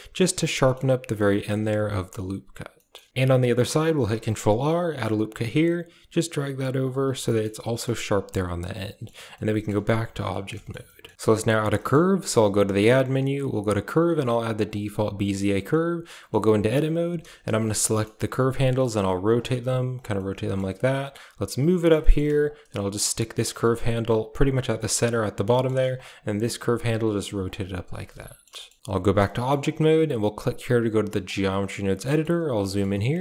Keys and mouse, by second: 0.4 shift+middle click, 1.0 middle click, 1.7 Tab, 2.6 middle drag, 3.0 shift+middle click, 3.1 ctrl+z, 4.0 ctrl+r, 6.9 a, 7.2 middle click, 7.4 Tab, 7.5 middle drag, 8.2-8.9 middle drag, 9.2 middle drag, 9.4 click, 9.7 a, 10.2 middle click, 10.5 shift+middle click, 10.8 middle drag, 11.7 shift+middle click, 12.1 shift+a, 15.6-16.0 middle drag, 15.8 typing, 16.2 Tab, 16.9 a, 17.6 a, 17.8 middle click, 18.2 r, 18.2 a, 19.3 r, 20.1 middle click, 20.7 r, 21.2 g, 21.9 shift+middle click, 22.2 r, 22.5 g, 23.6 r, 24.3 g, 24.7 shift+middle click, 25.4 shift+middle click, 25.9 click, 26.1 r, 26.6 g, 27.6 r, 28.0 middle click, 28.5 shift+middle click, 28.7 middle click, 28.8 Tab, 29.2 shift+middle click, 31.2 Tab, 31.9 shift+middle click, 32.6 shift+middle click.